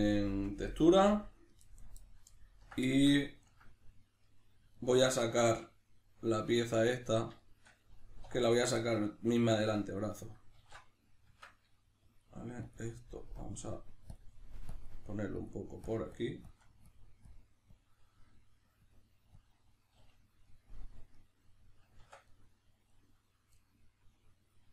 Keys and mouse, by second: 8.2 3, 8.5 right click, 8.8-11.3 middle drag, 10.6 alt+q, 11.3 Tab, 12.0 click, 15.9 shift+click, 16.9 click, 20.5 middle click, 22.0 Tab, 22.3 middle click.